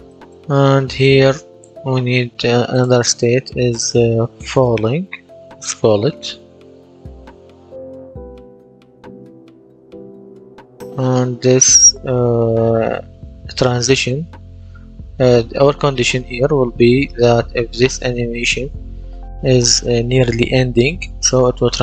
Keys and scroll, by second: 4.2-7.0 typing, 7.1 Return.